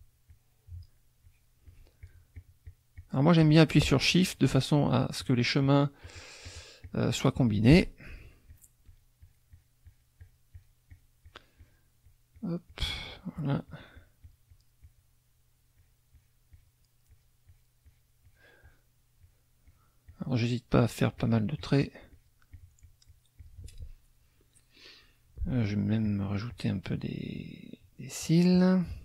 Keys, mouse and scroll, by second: 0.3 shift+click, 1.2 shift+click, 4.3 shift+click, 4.8 shift+click, 5.2 shift+click, 5.6 shift+click, 6.1 shift+click, 6.5 shift+click, 8.5 shift+click, 12.0 shift+click, 15.8 shift+click, 17.1 shift+click, 17.9 shift+click, 19.2 shift+click, 19.6 shift+click, 20.0 shift+click, 20.7 shift+click, 21.2 shift+click, 21.6 shift+click, 22.1 shift+click, 22.5-23.6 shift+drag, 26.0 shift+click, 26.5 shift+click, 26.9 shift+click, 27.3 shift+click, 27.8 shift+click, 28.2 shift+click, 28.9 shift+click.